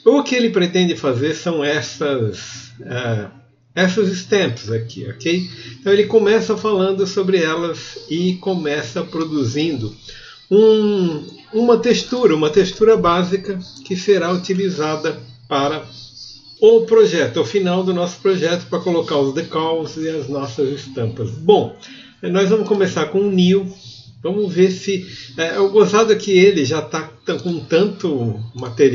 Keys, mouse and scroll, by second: 7.0 click.